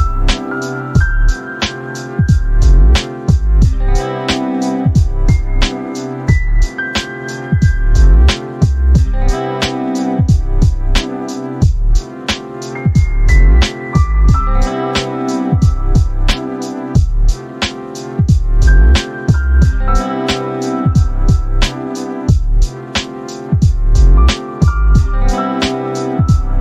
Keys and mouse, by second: 3.9 click, 4.6 click, 4.8 space, 6.4 click, 8.6 click, 9.0 click, 10.5-11.8 drag, 12.5 click, 13.1 click, 15.2 click, 15.8 click, 18.0-18.6 drag, 19.0 click, 21.3 ctrl+z, 23.6 ctrl+z, 26.2 click.